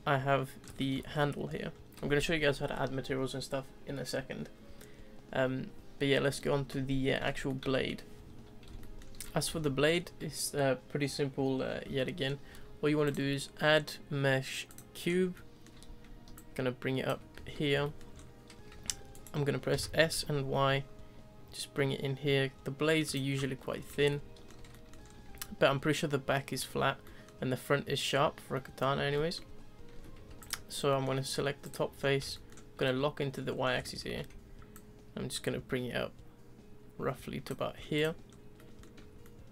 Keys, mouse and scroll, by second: 1.1 scroll up 2, 1.7-4.8 scroll down 1, 7.5 middle click, 8.8-13.0 middle drag, 13.0-15.0 drag, 15.0 scroll up 3, 15.3-16.3 middle drag, 16.3 ctrl+click, 17.3 z, 17.8-18.1 shift+middle drag, 18.1-18.6 scroll up 2, 18.6 s, 19.7 s, 23.4 scroll down 1, 23.6-25.0 middle drag, 25.0-25.9 scroll up 1, 27.0-29.9 middle drag, 29.9 Tab, 30.1 3, 30.4 click, 30.7 scroll down 1, 30.9 middle click, 31.6 click, 31.9-32.3 scroll down 2, 32.3-33.5 shift+middle drag, 33.5 scroll down 2, 33.8 shift+middle click, 34.7 ctrl+click, 38.0 click, 38.3 scroll up 2, 38.6 middle click, 39.0 Tab, 39.2 middle click.